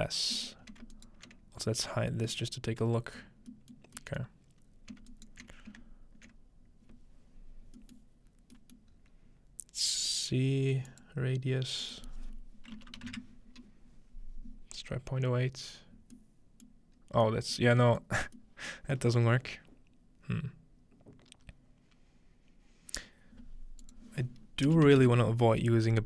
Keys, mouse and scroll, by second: 0.1 scroll down 1, 0.5-2.3 ctrl+middle drag, 0.6 scroll up 1, 1.0 ctrl+alt+right click, 1.8 scroll down 1, 3.1-4.4 scroll down 1, 4.4-6.3 middle drag, 4.6-6.3 scroll up 2, 8.0-8.6 middle drag, 8.3-8.9 scroll down 2, 8.9-9.9 scroll up 2, 10.9-13.1 drag, 16.7 middle click, 17.0-18.7 scroll up 2, 18.0-21.4 middle drag, 23.8-25.7 drag.